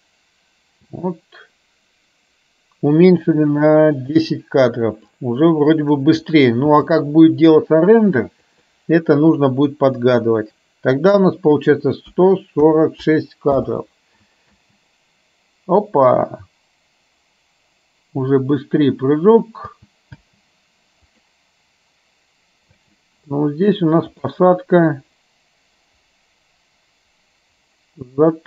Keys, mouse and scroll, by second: 0.9 space, 5.3-6.0 drag, 10.1 drag, 11.6 click, 14.6 space, 19.8 space, 20.3 space, 21.1 click, 22.8 space, 24.1 click, 25.1-28.4 drag.